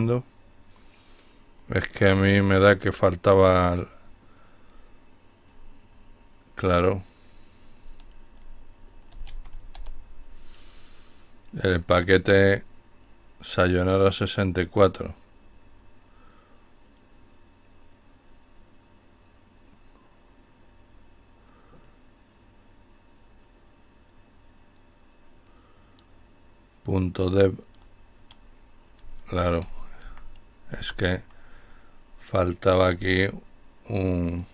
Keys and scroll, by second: 8.2-8.5 typing, 8.8 Return, 29.0 Up, 29.8 typing, 31.7 typing, 34.1 typing.